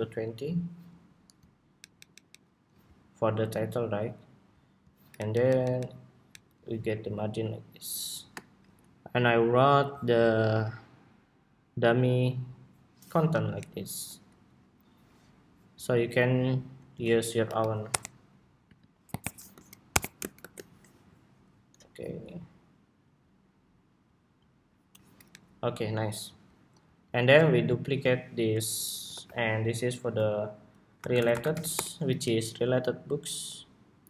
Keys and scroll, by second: 1.5 alt+Down, 4.9 alt+Down, 6.3 alt+Down, 8.9 Escape, 21.4 ↺, 28.2 super+d, 28.8 super+r.